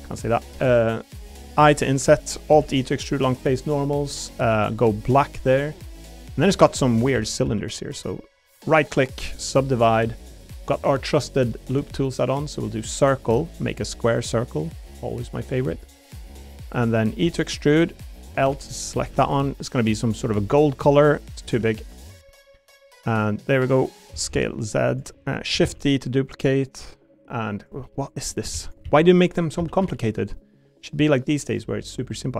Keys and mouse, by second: 0.6 middle click, 2.2 click, 2.5 alt+e, 3.8 click, 4.5 a, 4.7 g, 5.8 click, 6.1 middle click, 6.5 3, 7.1 shift+d, 7.4 s, 7.9 click, 8.6-9.7 right drag, 12.0 click, 12.7 click, 14.0 click, 14.0 s, 14.6 click, 15.7 s, 16.2 click, 17.2 e, 17.6 click, 18.4 l, 19.0 a, 19.2 g, 20.3 click, 21.4 s, 22.1 click, 24.1 s, 24.3 z, 24.9 click, 25.6 shift+d, 25.7 right click, 26.0 click, 27.8 middle click, 28.1 click, 28.5 shift+d, 28.8 s, 29.4 click, 29.6 s, 29.8 y, 31.3 click.